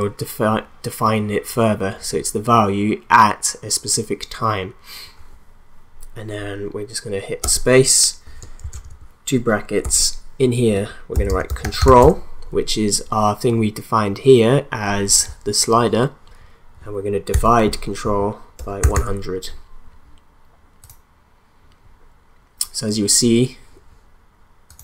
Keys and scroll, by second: 7.5-9.3 typing, 9.8 Left, 10.9-12.5 typing, 17.3 /, 18.4-19.3 typing.